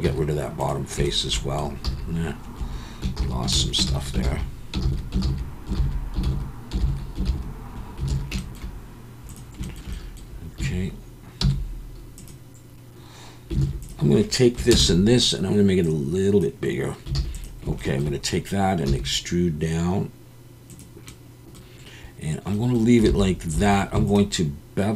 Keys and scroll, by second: 0.0 x, 1.8 z, 3.2 z, 3.9 ctrl+z, 4.3 ctrl+z, 4.9 ctrl+z, 5.3 ctrl+z, 5.8 ctrl+z, 6.3 ctrl+z, 6.9 ctrl+z, 7.3 ctrl+z, 8.1 alt+a, 10.6 a, 11.4 m, 13.6 alt+a, 14.7 ctrl+KP_Add, 17.2 alt+a, 18.9 e, 23.2 alt+a, 23.5 2.